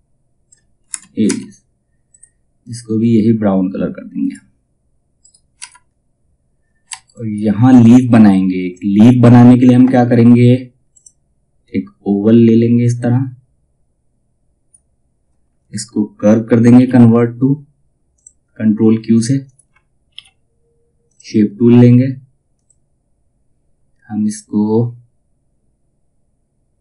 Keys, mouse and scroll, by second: 0.4 space, 1.6 click, 4.7 right click, 5.4-5.8 scroll down 1, 6.4 F2, 6.6 click, 10.4-16.3 drag, 16.3 ctrl+q, 17.6 click, 19.7 ctrl+q, 20.6 click, 24.5 typing.